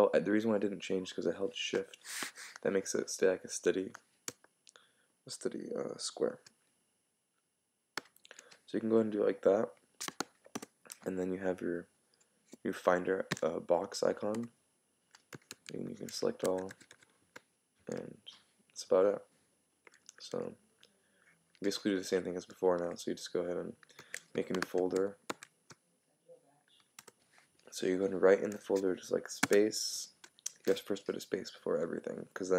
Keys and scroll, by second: 10.5 Return, 14.3 Return, 15.5 super+a, 16.4 super+c, 25.0 shift+super+m, 25.3 shift+super+n, 27.0 Return.